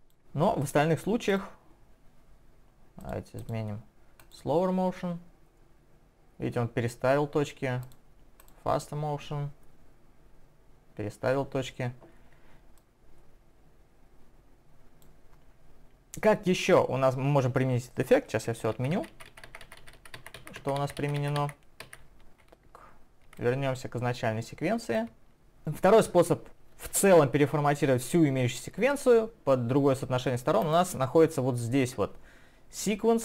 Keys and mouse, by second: 0.7 click, 1.3 click, 12.8 click, 18.8 ctrl+z, 23.4 click, 25.3 double click.